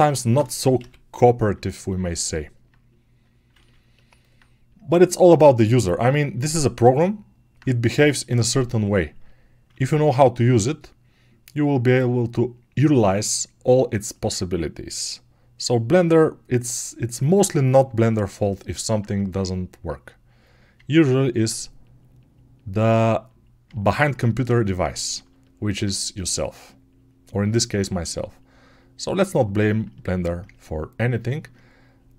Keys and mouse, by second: 4.2-6.3 right drag, 6.3 alt+click, 6.5 alt+right click, 6.5 alt+click, 6.7 alt+right click, 16.7-32.1 alt+drag.